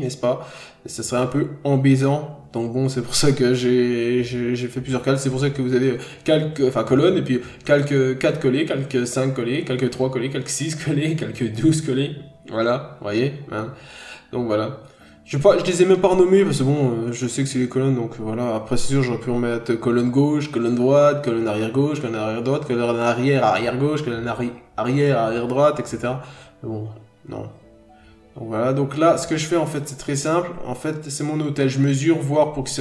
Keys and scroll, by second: 1.5 ctrl+z, 2.0 ctrl+z, 2.4 ctrl+z, 2.9 scroll down 1, 3.1 n, 3.3 scroll up 1, 5.2 ctrl+z, 5.7 ctrl+z, 6.2 ctrl+z, 6.8 ctrl+z, 7.4 scroll up 1, 7.7 ctrl+z, 8.3 ctrl+z, 9.0 ctrl+z, 9.8 scroll down 1, 10.2 n, 10.5-10.9 scroll up 1, 15.7 scroll down 1, 17.6-18.0 scroll up 1, 20.3 ctrl+z, 21.0 ctrl+z, 22.4 ctrl+z, 24.0 b.